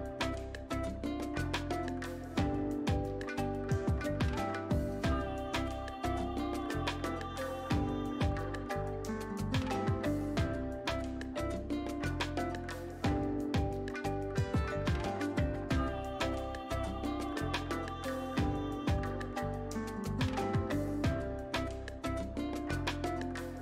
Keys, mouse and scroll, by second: 2.7 alt+space, 3.0-8.6 alt+drag, 8.6-17.3 drag, 17.3-22.8 alt+drag, 23.1-23.6 alt+drag.